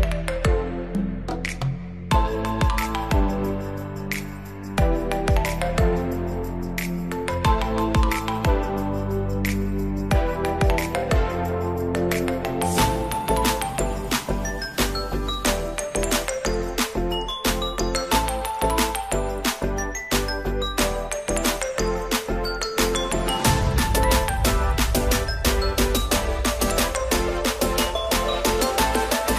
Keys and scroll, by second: 3.4 x, 22.4 ], 27.5 ctrl+0.